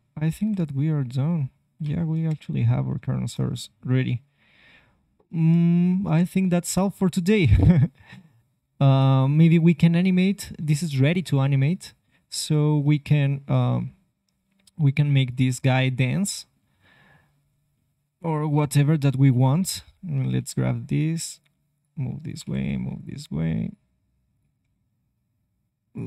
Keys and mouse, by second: 0.1 r, 0.4 middle click, 0.8-1.8 middle drag, 2.2 KP_3, 2.7-8.7 middle drag, 7.5 r, 11.5-13.5 middle drag, 13.4 KP_3, 13.5 KP_3, 15.2 click, 20.3 g, 22.5 g, 23.0-26.0 drag, 24.6 g.